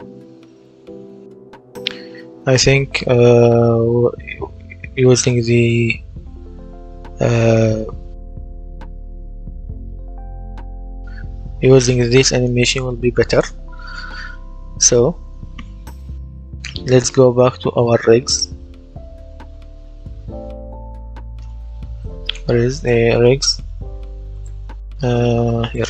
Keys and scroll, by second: 0.4 w, 1.2 w, 8.2 space, 10.7 Escape.